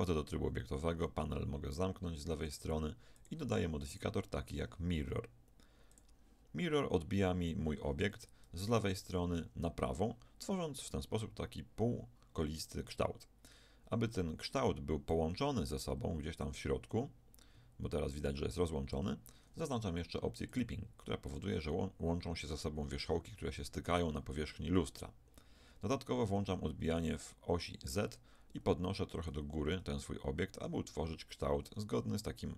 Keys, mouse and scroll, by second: 0.7 t, 3.1-6.6 drag, 8.0 Tab, 8.6 a, 8.8 a, 15.0-18.9 drag, 20.4-23.5 drag, 26.9-31.5 drag.